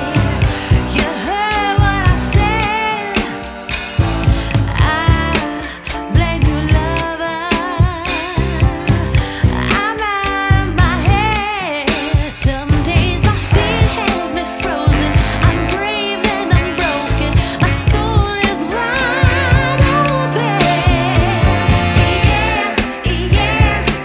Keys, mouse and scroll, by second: 1.2 click, 3.4 shift+a, 13.5 click, 15.0 shift+d, 18.8 click, 19.7 shift+a.